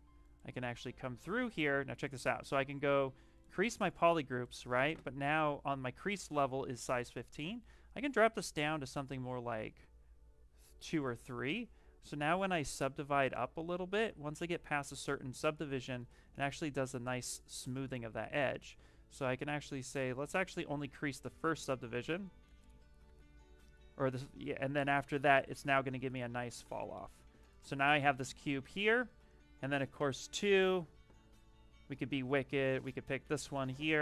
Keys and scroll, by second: 3.4 shift+f, 6.4 shift+m, 7.0 shift+m, 12.4 ctrl+d, 12.9 ctrl+d, 14.0 ctrl+d, 14.7 ctrl+d, 17.7 ctrl+z, 18.0 ctrl+z, 18.3 ctrl+z, 21.8 ctrl+d, 22.4 ctrl+d, 22.9 ctrl+d, 25.2 shift+f, 25.5 shift+f, 28.1 shift+f.